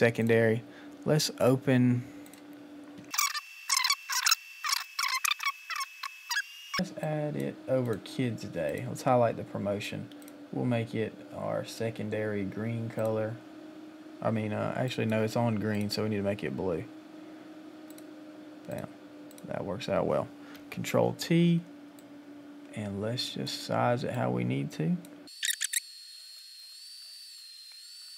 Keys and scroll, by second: 20.5 ctrl+t, 26.1 Return, 26.5 Return, 27.7 Return, 28.0 space, 28.0 Right.